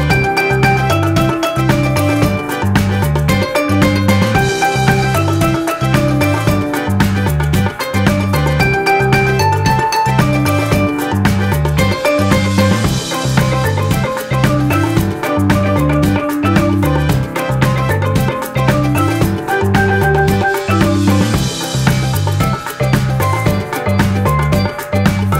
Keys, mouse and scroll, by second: 3.8 alt+click, 7.9 ctrl+d.